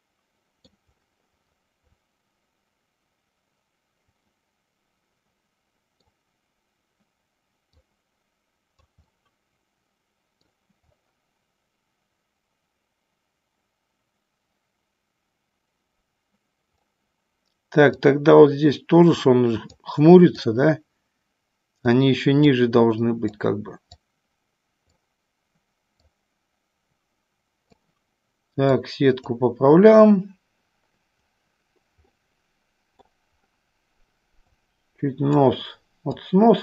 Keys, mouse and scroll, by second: 4.4-6.2 middle drag, 7.8-9.0 drag, 9.2-10.7 middle drag, 18.0-20.0 drag, 20.6-22.1 drag, 22.6 click, 24.1-25.2 drag, 26.2-28.0 drag, 28.8 click, 32.2 middle click, 34.5-35.6 drag, 36.3-36.6 drag.